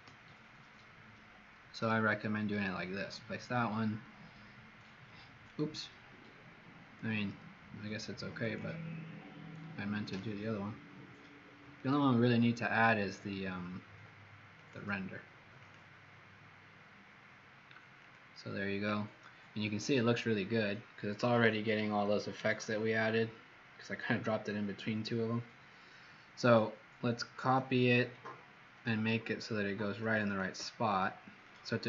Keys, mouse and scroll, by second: 22.4-24.1 scroll down 3, 30.2 shift+click, 31.3 click.